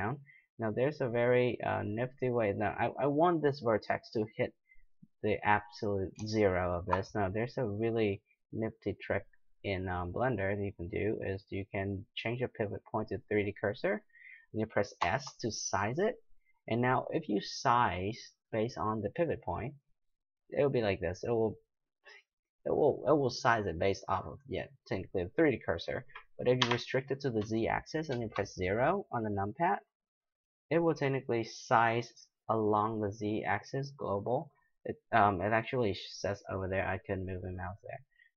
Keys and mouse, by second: 2.9-8.5 middle drag, 9.1-10.9 drag, 15.0 s.